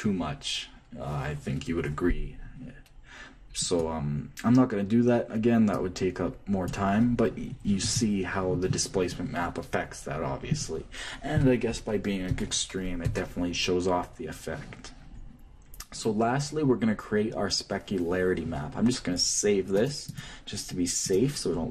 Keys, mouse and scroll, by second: 4.2-6.1 drag, 6.3-8.0 drag, 20.3-21.7 drag.